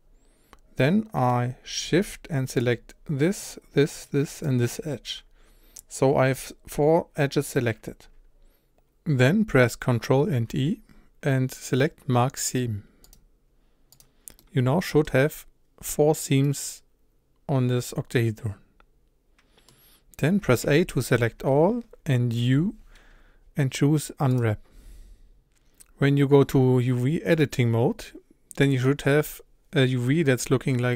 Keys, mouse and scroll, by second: 0.8-2.6 middle drag, 2.6 shift+click, 3.4 shift+click, 4.0 shift+click, 4.4 shift+click, 7.6-13.1 middle drag, 13.1 ctrl+e, 14.0 click, 14.4-20.6 middle drag, 20.6 a, 24.4 u, 27.4-28.4 drag.